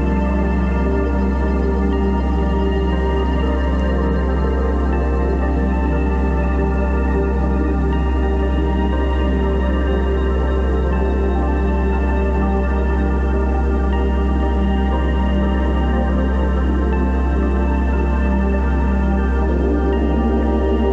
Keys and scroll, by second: 7.0 g, 8.7 ctrl+t.